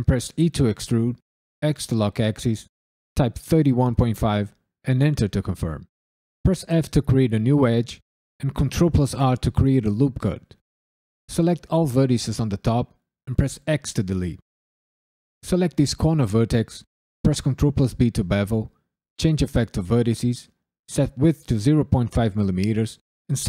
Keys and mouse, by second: 0.3 e, 1.6 x, 3.1 KP_3, 3.5 KP_1, 3.9 KP_Decimal, 4.3 KP_5, 4.8 KP_Enter, 6.4 f, 8.5 ctrl+r, 8.9 click, 10.0 click, 13.6 x, 15.2 click, 17.7 ctrl+b, 18.3 click, 19.7 click, 20.5-23.4 drag.